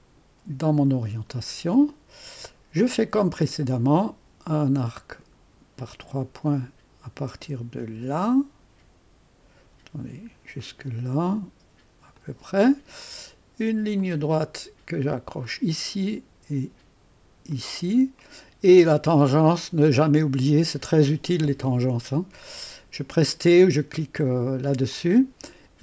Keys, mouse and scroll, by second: 1.1-4.0 scroll up 2, 4.0 click, 5.8 click, 10.6 click, 12.2 click, 14.0 click, 14.5 click, 15.4 click, 17.5 click, 18.2 middle click, 18.2 right click, 24.9 click.